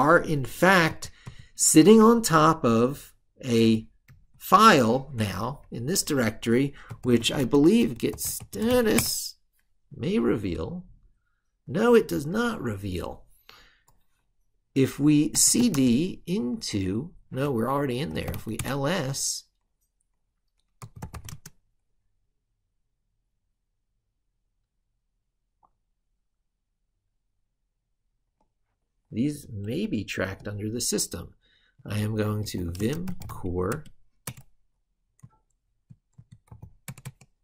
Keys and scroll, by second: 2.0 ctrl+super+Right.